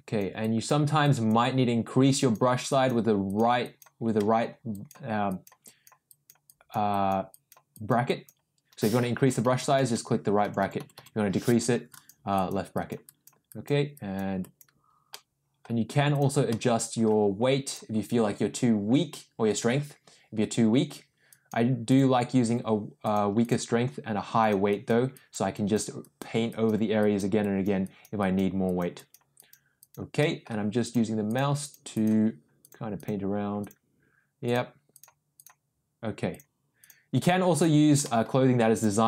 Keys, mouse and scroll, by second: 0.4 click, 1.0 click, 2.1 click, 2.6 click, 3.3 click, 3.6 click, 4.1 middle click, 4.7 click, 5.2 click, 5.6 click, 6.1 click, 6.4 click, 6.8 click, 7.3 click, 7.7 click, 8.0 click, 9.2-10.9 typing, 11.9 click, 12.3 click, 12.7 click, 13.0 click, 13.4 click, 13.9 click, 14.4 click, 15.1 middle click, 16.1 click, 16.4 middle click, 17.6 click, 21.2 click, 21.9 click, 23.0 click, 23.4 click, 24.3 click, 24.6 click, 25.1 click, 25.5 click, 26.0 click, 26.4 click, 26.9 click, 27.3 click, 27.8 click, 28.1 click, 28.6 click, 28.9 click, 29.3 click, 29.8 click, 30.2 middle click, 30.8 click, 31.2 click, 31.6 click, 31.9 click, 32.6 click, 32.9 click, 33.6 click, 34.4 click, 34.9 click, 35.3 click, 36.3 click, 36.8 click, 37.5 click, 38.0 middle click, 38.7 click.